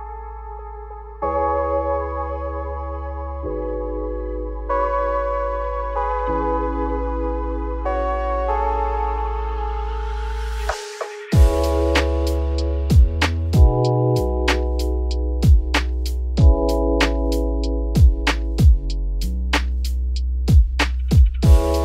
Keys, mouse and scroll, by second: 0.7 n, 3.3 click, 4.2 click, 4.7 n, 5.0-5.8 scroll down 4, 5.8 g, 10.2-12.5 drag, 12.5-13.1 scroll up 3, 13.1-14.6 scroll down 1, 14.6 scroll down 1, 14.7-17.2 drag, 17.2-17.8 scroll up 2, 17.8 click, 18.1 scroll up 4, 18.3 Tab, 18.9 middle click, 19.7 `, 20.4 Tab, 20.6-20.9 scroll up 2, 20.9 shift+middle click, 21.7 alt+x.